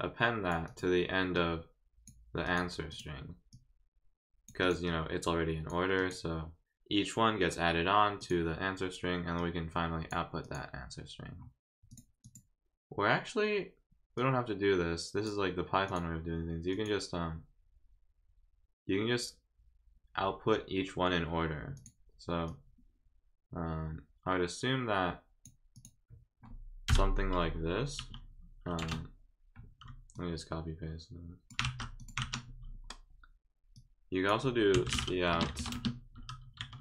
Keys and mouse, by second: 0.6 click, 1.3 click, 2.4 click, 2.9 click, 3.5 click, 4.6 click, 4.8 click, 6.0 click, 8.2 click, 9.4 click, 10.4 click, 11.9 click, 12.2 click, 14.1-15.2 drag, 15.9 click, 16.7 click, 21.7 click, 22.4-25.4 drag, 25.7 click, 30.1-31.5 drag, 32.0 click, 33.7 click, 35.3 space, 35.7 space.